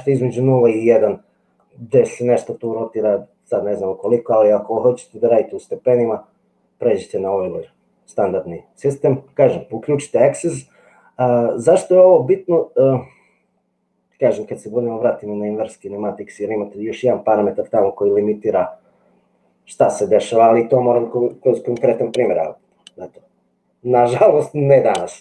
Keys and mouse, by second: 2.6-4.4 drag.